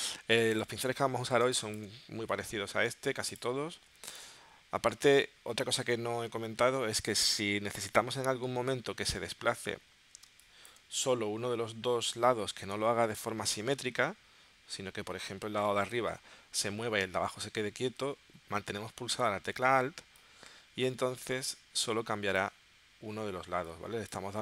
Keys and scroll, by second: 1.4 space, 6.6 shift+w, 10.4 space.